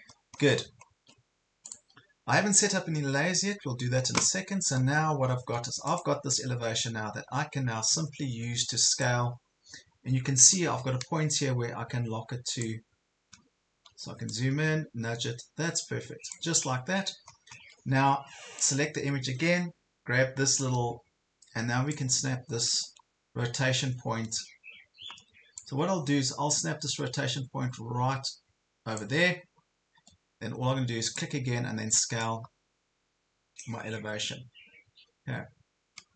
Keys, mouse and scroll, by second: 1.6 click, 3.1 scroll up 1, 5.1 ctrl+scroll up 1, 5.9-9.2 drag, 9.3 ctrl+scroll up 1, 10.6-13.3 drag, 13.5 ctrl+scroll up 1, 14.3-16.4 drag, 16.6 ctrl+scroll down 1, 17.3 ctrl+scroll down 1, 18.6-22.3 drag, 22.8 ctrl+scroll up 1, 23.4 ctrl+scroll up 1, 25.6-29.2 drag, 29.3 ctrl+scroll down 1, 31.1-36.1 drag.